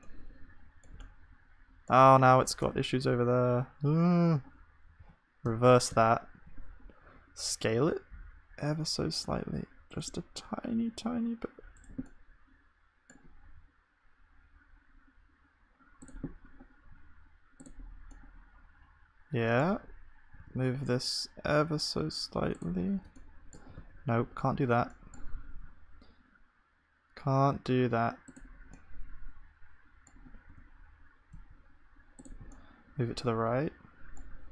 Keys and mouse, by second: 2.6 Tab, 5.0 ctrl+z, 6.0 ctrl+z, 7.7 s, 10.4 s, 13.5-16.9 middle drag, 13.5 s, 16.9 s, 20.1 middle click, 23.8 ctrl+z, 25.4 s.